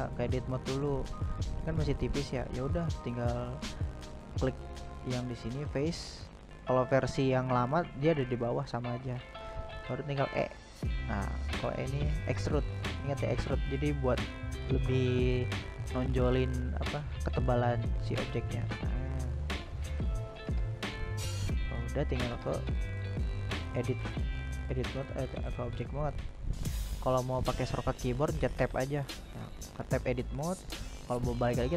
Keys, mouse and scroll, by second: 2.7 click, 6.6 e, 16.3 middle click, 16.7 Tab, 17.1-18.5 middle drag, 18.5 Tab, 18.8 Tab, 19.0-22.1 drag, 22.1-23.3 middle drag, 23.3 click, 24.8 Tab, 25.6 click, 26.6 click, 28.0 Tab, 28.7-29.9 drag, 30.3 right drag, 30.6-31.2 middle drag, 31.2 right drag, 31.6-31.7 middle drag.